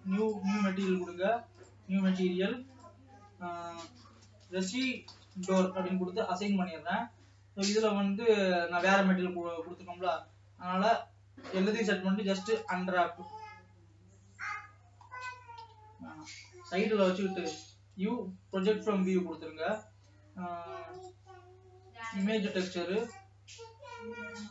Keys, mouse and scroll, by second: 0.9-5.7 drag, 22.7-24.5 drag.